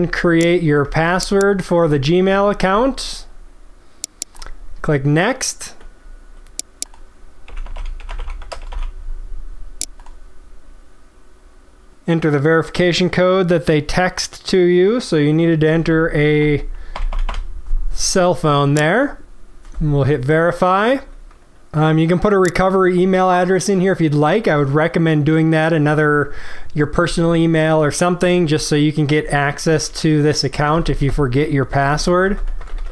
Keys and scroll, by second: 1.0 ctrl+v.